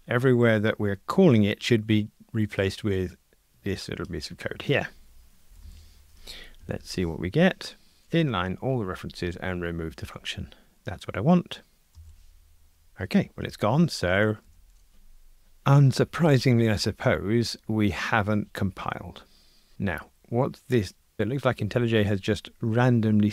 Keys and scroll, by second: 6.7 alt+super+n, 14.5 ctrl+r.